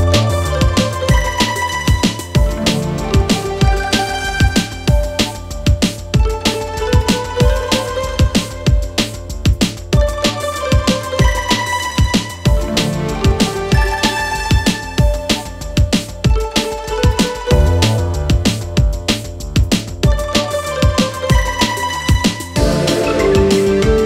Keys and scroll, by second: 7.9 ctrl+d, 8.0 Escape, 11.2 ctrl+z, 11.9 shift+f, 15.6 Escape, 20.4 ], 21.4 Delete, 21.9 Delete, 22.7 Escape.